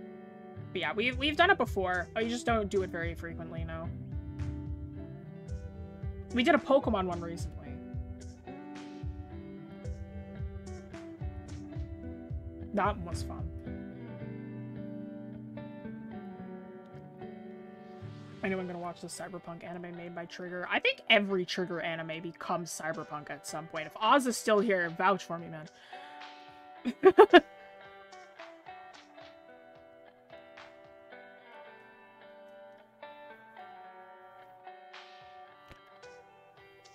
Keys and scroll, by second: 2.1-2.7 scroll down 1, 4.5 scroll up 1, 13.1 scroll down 1.